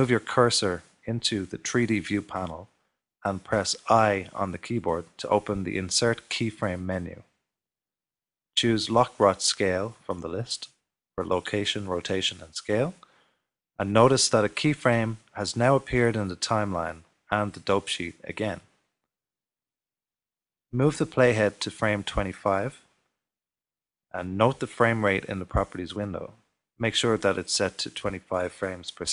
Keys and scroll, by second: 5.5 i.